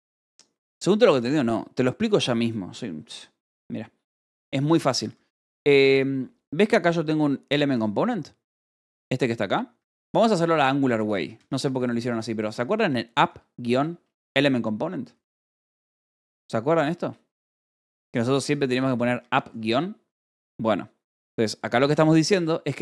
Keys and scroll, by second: 5.0 j, 10.1-13.2 typing, 11.6 Escape, 15.4-19.3 typing, 21.2-22.8 typing.